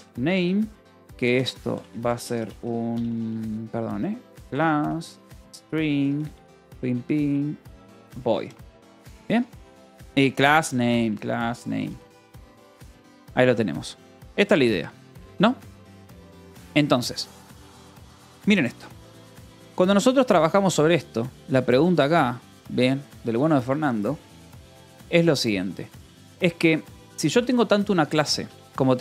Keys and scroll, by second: 0.0-0.4 typing, 1.6-13.8 typing, 8.9 ctrl+s, 13.0 ctrl+s, 14.0 Return, 14.6 Escape, 21.5 j, 27.1 j, 27.7 Escape, 28.6 Escape, 28.9 k.